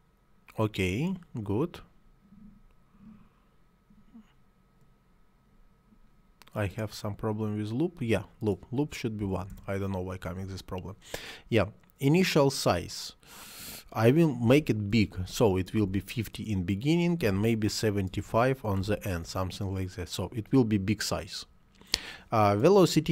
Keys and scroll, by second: 9.0 1, 9.3 Return, 14.1 5, 14.3 0, 14.9 5, 15.7 0, 17.0-18.7 typing, 19.1 Return.